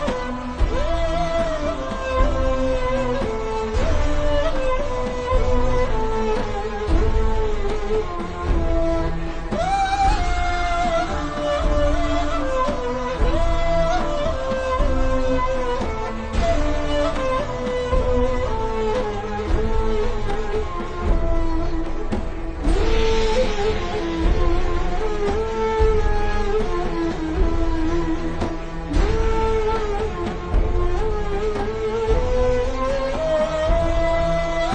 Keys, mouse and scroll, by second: 12.1 alt+shift+scroll up 1, 12.9-13.6 alt+shift+scroll up 2, 13.8 alt+shift+scroll down 1, 14.6-15.2 ctrl+scroll down 2, 15.2 click, 15.4-15.9 scroll down 1, 15.9 click, 16.6 ctrl+scroll down 2, 17.6 ctrl+scroll down 1, 18.0-18.4 alt+shift+scroll up 2, 18.4 click, 20.8 i, 21.0 click, 21.2 v, 21.3 click, 21.7 ctrl+scroll down 2, 22.0-22.9 alt+shift+scroll up 3, 22.9 click, 25.2 i, 26.0 click, 26.2 v, 26.3 click, 28.7 shift+click, 29.9 shift+click, 31.0 click, 31.3 v, 31.6 click, 32.2 shift+click, 33.7 click, 33.9 v, 34.0 click.